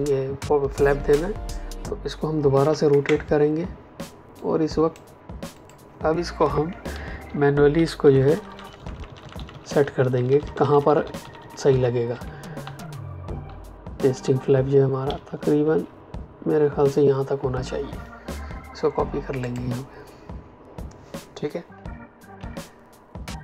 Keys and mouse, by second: 2.5 r, 2.8 Return, 4.3 click, 6.9 Down, 7.7 Up, 15.0 Down, 19.4 click, 22.3 v.